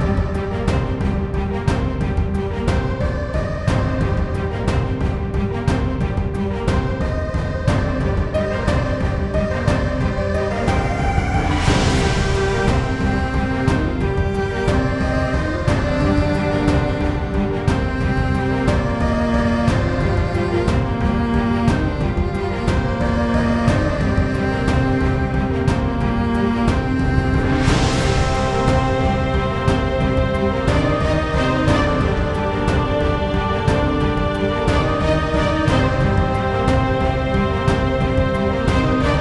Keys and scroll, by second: 1.4-3.9 typing, 4.5 Return, 10.7-12.2 typing, 16.9-19.6 typing, 20.6-21.7 typing, 22.9 Down, 23.1 Down, 23.8 Return, 25.9-28.0 typing, 28.5 Return, 34.0-35.9 typing, 37.6-38.3 typing, 38.6 Return.